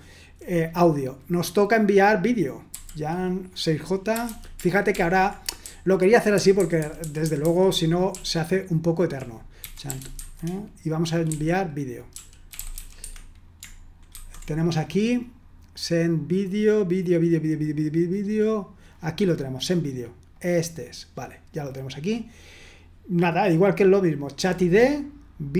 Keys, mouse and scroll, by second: 0.0-0.3 typing, 2.7 y, 4.1-10.2 typing, 11.3-12.7 typing, 13.0 Escape, 20.3 click.